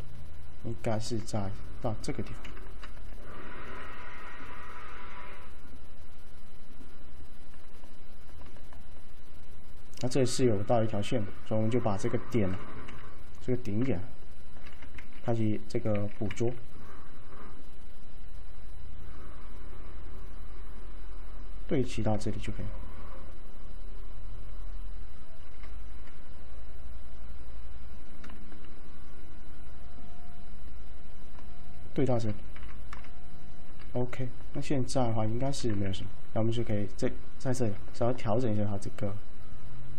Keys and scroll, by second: 2.6 F3, 3.7 alt+c, 12.9 F3, 15.1-16.0 typing, 19.5 typing, 32.6 F3.